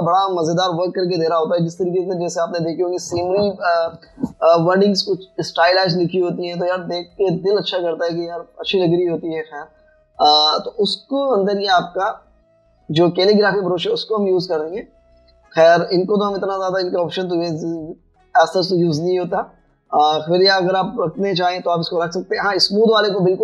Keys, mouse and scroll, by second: 15.5 double click.